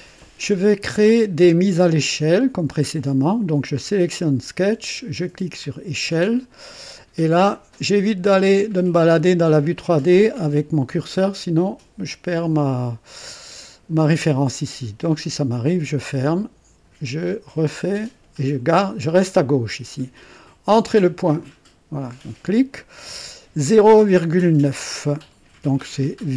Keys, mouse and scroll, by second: 5.6 click, 15.5 click, 17.8 click, 21.4 click.